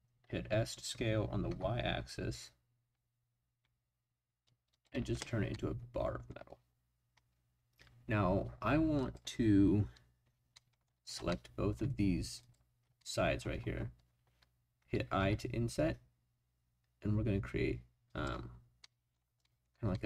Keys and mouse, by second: 1.5 y, 4.7 click, 5.5 middle click, 9.0 click, 10.5 middle click, 11.3 middle click, 13.0 click, 15.2 i, 18.1 click, 18.8 click, 18.9-20.0 middle drag.